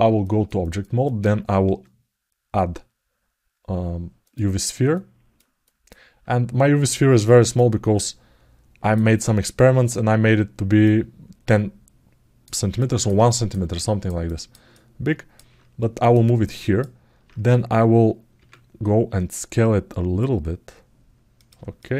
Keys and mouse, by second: 0.0 ctrl+alt+middle click, 0.4 alt+shift+middle click, 0.8 alt+middle click, 1.4 shift+a, 4.7 ctrl+alt+middle click, 5.4 alt+middle click, 7.3-8.7 drag, 10.6-12.2 drag, 12.5 ctrl+alt+middle click, 13.0 alt+shift+middle click, 13.5 alt+middle click, 14.0 ctrl+alt+middle click, 14.5 alt+middle click, 15.9 alt+middle click, 18.1 Tab, 18.8 s, 21.5 alt+shift+middle click, 21.9 ctrl+alt+middle click.